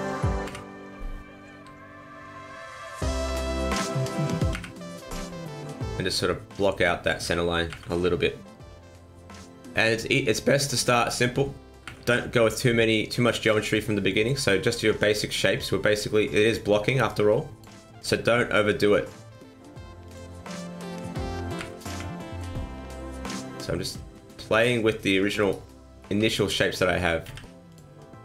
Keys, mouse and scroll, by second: 0.4 KP_1, 1.5 g, 2.7 r, 3.1 middle click, 3.4 n, 3.7 right click, 4.4 KP_1, 6.0 click, 7.6 KP_1, 7.8 KP_3, 9.0 scroll down 1, 9.4 middle click, 10.6 right click, 11.0 shift+right click, 11.8 KP_1, 12.0 KP_3, 13.6 click, 15.1 click, 17.0 click, 17.8 middle click, 20.0 click, 20.7 right click, 21.5 KP_1, 21.8 KP_3, 23.2 g, 25.4 right click, 26.0 b, 27.2 z.